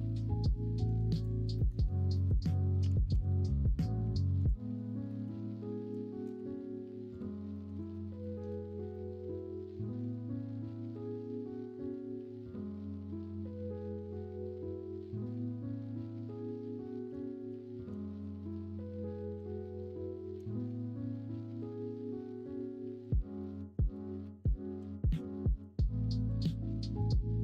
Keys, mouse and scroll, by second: 1.5 middle click, 2.1 middle click, 2.8 g, 5.0 middle click, 5.0 scroll up 1, 5.2 scroll down 1, 5.8 g, 7.5 middle drag, 7.8 alt+z, 8.3 middle drag, 8.9-16.2 middle drag, 16.3-17.1 middle drag, 17.3 shift+middle drag, 18.0 middle drag, 18.5-19.4 middle drag, 19.7 middle drag, 20.5 shift+middle drag, 23.3 middle drag, 24.2 middle drag, 25.3-25.6 middle drag, 25.9 shift+middle drag, 26.3-26.9 middle drag.